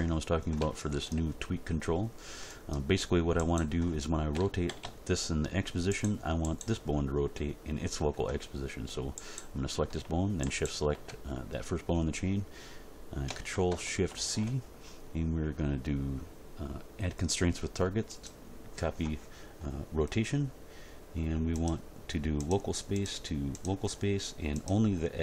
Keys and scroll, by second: 4.3 r, 4.7 x, 14.1 ctrl+shift+c.